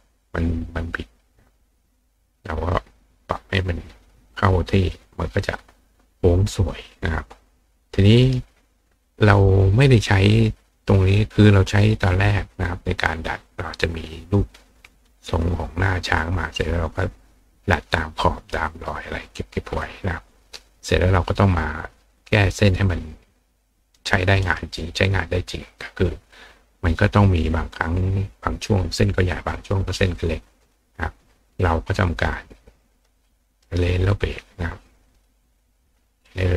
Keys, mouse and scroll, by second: 0.9 click, 2.7-3.6 drag, 4.3-5.0 drag, 5.4 click, 6.9 click, 7.9 click, 8.2 right click, 22.2-23.4 drag, 23.9 right click, 24.4 right click, 30.1 click, 32.1 click, 32.9 click, 33.6 right click, 35.1 click, 36.2 click.